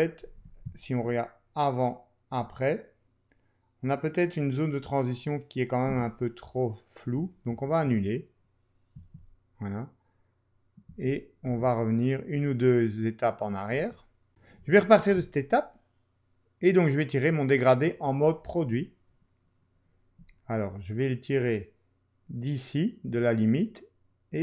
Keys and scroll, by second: 7.6 super+z, 8.9 super+z, 10.9 super+z, 11.4 super+z, 13.7 super+z.